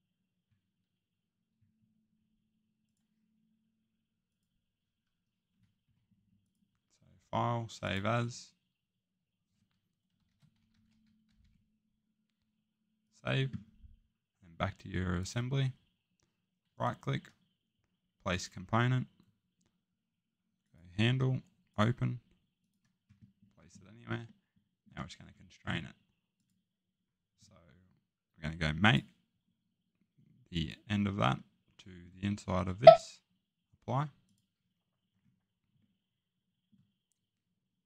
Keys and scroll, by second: 5.8 Escape, 10.3-11.4 typing, 23.6 Escape.